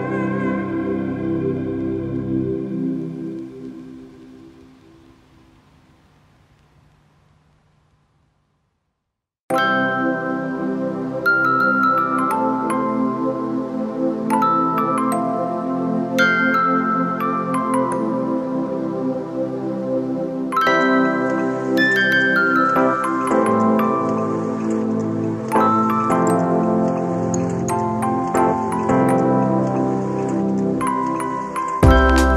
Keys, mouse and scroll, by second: 11.8 ], 16.8 ].